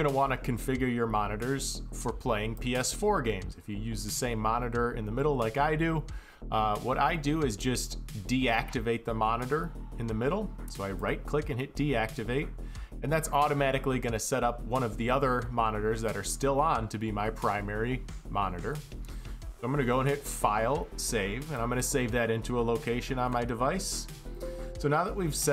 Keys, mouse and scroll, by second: 2.2 click, 5.7 click, 10.6 click, 11.1 click, 16.1-19.2 drag, 21.2 click, 23.7 click.